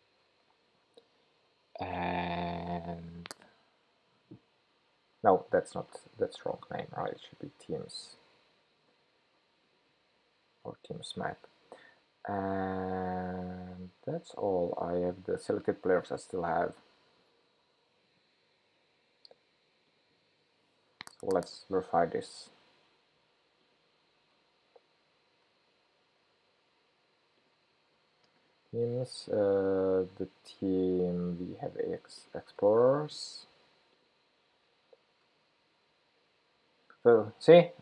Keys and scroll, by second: 7.5 shift+super+p, 21.8 ctrl+shift+k, 24.9 super+v, 32.9 super+c, 35.2 super+v.